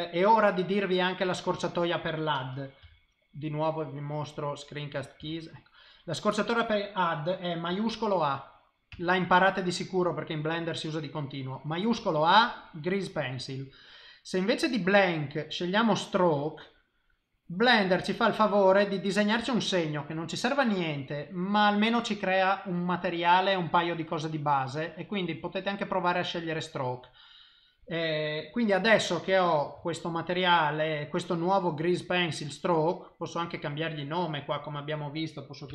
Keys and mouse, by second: 5.2 n, 5.6 middle click, 8.2 shift+i, 8.9 shift+a, 21.3 middle click, 27.0 middle click, 27.4 middle click, 27.9 middle click, 29.1 ctrl+middle click, 29.8 shift+middle click, 30.3 middle click, 33.3 click, 34.6 click, 34.7 click.